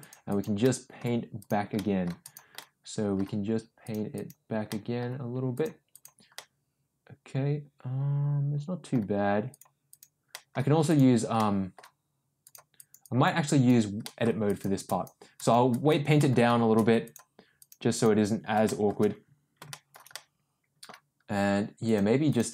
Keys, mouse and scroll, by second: 0.2 click, 0.6 middle click, 1.3 click, 1.7 middle click, 2.2 click, 2.5 middle click, 3.8 click, 4.1 click, 4.7 middle click, 5.5 click, 5.9 click, 6.3-8.9 middle drag, 9.5 click, 9.8 click, 10.3 middle click, 10.8 click, 11.3 middle click, 12.4 click, 12.7 click, 13.0 click, 13.4 click, 14.0 middle click, 14.4 click, 14.8 click, 15.3 click, 15.7 click, 16.1 middle click, 17.0 click, 17.5 click, 17.9 click, 18.6 shift+middle click, 19.7 shift+middle click, 20.1 middle click, 21.8 click, 22.2 click.